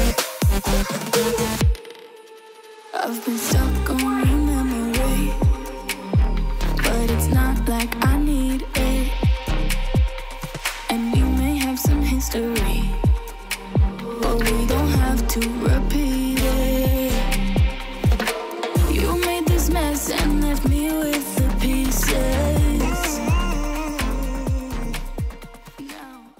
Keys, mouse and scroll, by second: 3.6 Return, 11.0 ctrl+0.